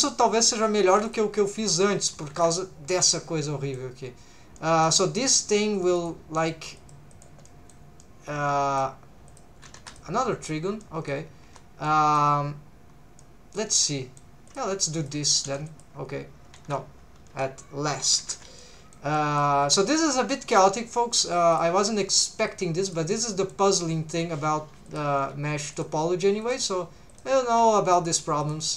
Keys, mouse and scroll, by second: 0.1 middle click, 0.9 1, 1.1 click, 1.4 middle click, 2.2 2, 2.4 click, 3.1 middle click, 4.6 middle click, 5.3 click, 6.0 click, 6.4 click, 6.8 click, 7.1 click, 7.5 middle click, 8.0 middle click, 9.3 click, 9.9 click, 10.8 middle click, 11.5 1, 11.8 middle click, 13.2 middle click, 13.9 middle click, 14.5 click, 14.9 shift+click, 15.4 m, 16.6 ctrl+z, 17.3 m, 18.3 alt+a, 18.6 middle click, 19.1 middle click, 19.7 1, 19.9 click, 20.1 middle click, 20.9 shift+v, 21.5 shift+click, 22.1 shift+v, 22.5 shift+click, 22.8 click, 23.1 middle click, 24.3 shift+v, 24.9 shift+click, 25.2 g, 25.7 shift+click, 26.4 click, 27.1 click, 27.9 shift+click, 28.4 click.